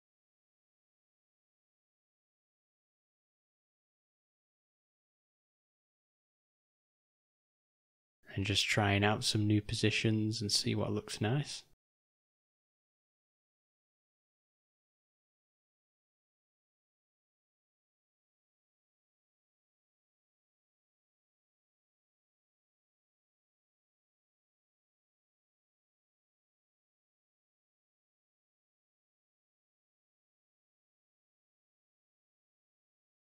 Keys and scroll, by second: 1.1 r, 4.8 r, 7.7 g, 12.6 g, 14.5 r, 18.1 g, 26.4 r, 28.6 r, 30.0 g, 33.0 g.